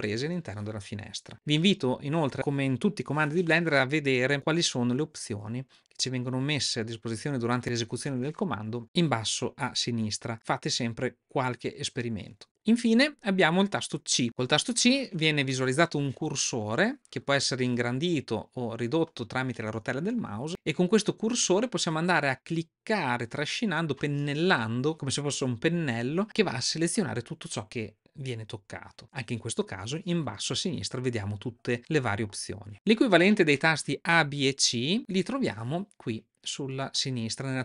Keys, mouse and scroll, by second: 36.8 click.